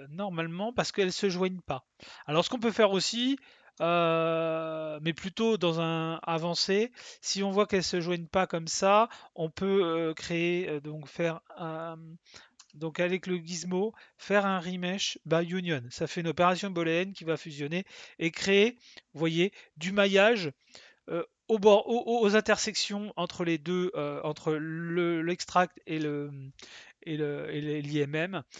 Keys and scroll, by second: 12.5 w.